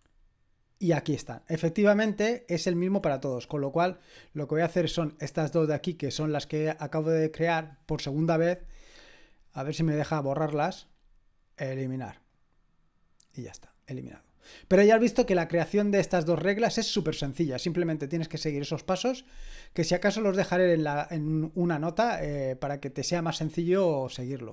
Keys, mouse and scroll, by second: 0.0-0.9 scroll down 1, 1.7 click, 3.4-4.0 scroll up 2, 4.0-4.7 scroll down 2, 5.2 click, 6.5 click, 9.0-10.2 scroll down 2, 10.2-10.9 scroll up 1, 10.9-12.3 scroll up 1, 12.3 click, 14.1 click, 23.5-24.4 scroll down 1.